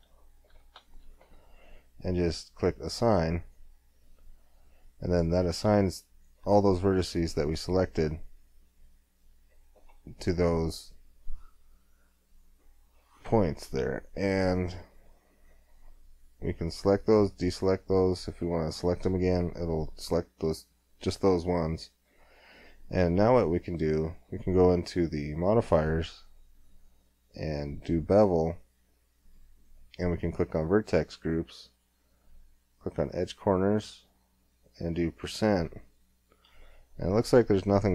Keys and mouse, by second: 3.4-5.2 drag, 5.2-6.7 middle drag, 8.7 middle click, 14.4 Tab, 15.4 Tab, 16.6-17.8 drag, 19.5 click, 19.7 middle click, 20.0 click, 20.4-21.9 middle drag, 21.9 Tab, 25.4-26.9 drag, 28.6 middle click, 30.6-35.8 drag, 35.8-36.9 middle drag, 37.1 middle click, 37.6-37.9 middle drag.